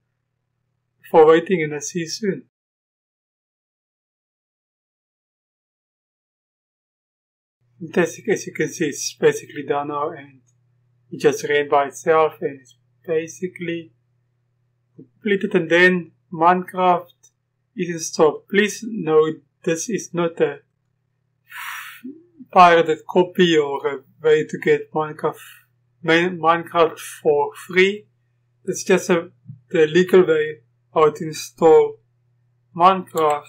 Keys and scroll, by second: 33.1-33.4 typing.